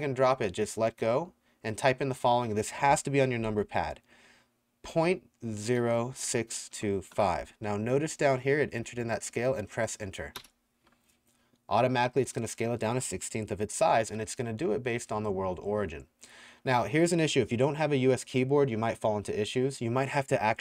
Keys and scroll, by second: 4.9-7.1 typing, 10.4 KP_Enter.